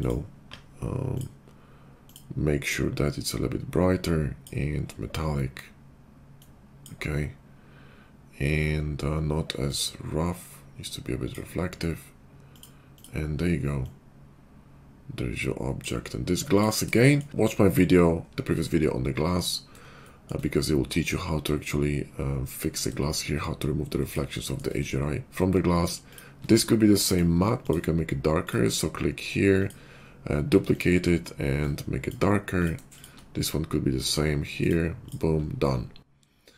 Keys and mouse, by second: 0.0-2.1 middle drag, 2.1 click, 2.2-6.4 middle drag, 6.4-12.5 drag, 12.5 middle click, 12.9 click, 13.0-27.1 middle drag, 27.1-28.5 drag, 28.5-29.6 middle drag, 29.6-30.8 drag, 30.8-32.6 middle drag, 32.6 click, 32.7 shift+middle click, 32.9 shift+click, 33.0-34.0 shift+middle drag, 34.0-35.1 drag, 35.1-36.5 middle drag.